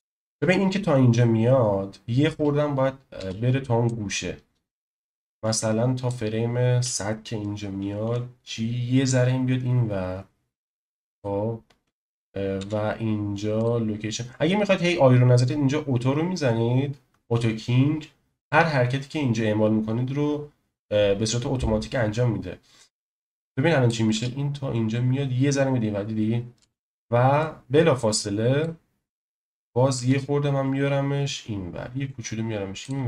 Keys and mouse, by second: 3.4 space, 3.9-6.1 drag, 8.0 g, 11.1 click, 12.6 i, 23.3-23.9 drag, 24.1 space, 26.6 space, 27.4-28.7 drag, 29.9 g.